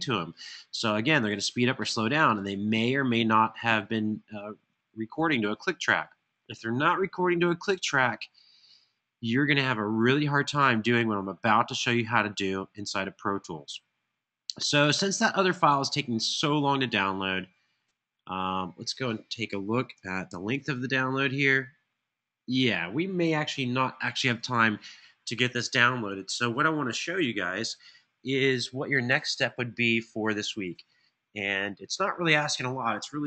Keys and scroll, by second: 20.0 alt+super+l.